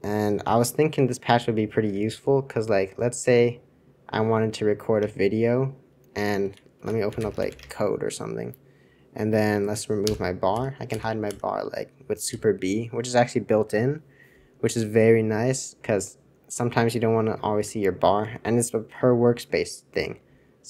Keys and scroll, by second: 0.8 super+c, 1.1 super+c, 2.1 super+{, 2.8 super+{, 2.9-5.0 super+{, 5.0 super+Return, 6.4 super+c, 6.7 super+r, 6.8-8.0 typing, 10.0 super+b, 10.0 typing, 10.5 super+b, 10.9 super+b, 11.2-15.4 super+b, 17.9 super+b, 18.2 super+2, 18.8 super+3, 19.3 super+1, 20.0 super+3.